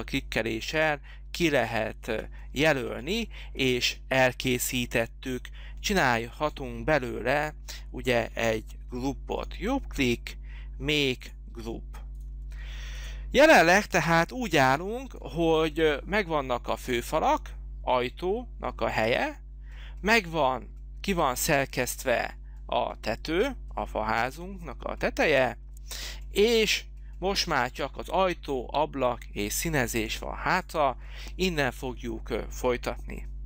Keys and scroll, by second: 14.1 h.